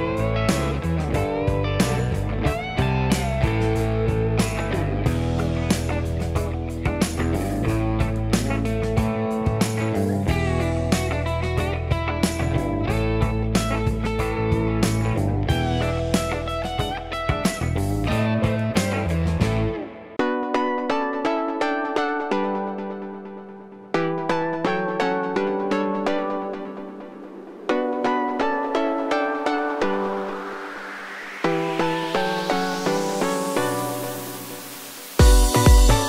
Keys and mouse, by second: 0.0-3.1 typing, 0.8 ctrl+x, 1.2 ctrl+z, 3.6 ctrl+x, 4.1 ctrl+z, 4.4 typing, 5.5 Tab, 6.8 Tab, 6.9 Tab, 7.8 ctrl+x, 8.1 ctrl+x, 11.3 2, 11.6 click, 11.6 middle click, 12.1 ctrl+click, 12.1 ctrl+middle click, 15.1 ctrl+click, 16.2 v, 17.1-19.1 middle drag, 18.8 3, 19.1 click, 19.5 ctrl+middle click, 19.7 ctrl+click, 19.8-23.2 shift+middle drag, 22.2 ctrl+click, 23.2 ctrl+click, 23.5-28.0 ctrl+middle drag, 26.7 1, 27.3 alt+z, 27.4 alt+z, 27.5 w, 28.0-36.0 ctrl+drag, 34.9 w, 35.0 w, 35.1 w, 35.4 alt+s.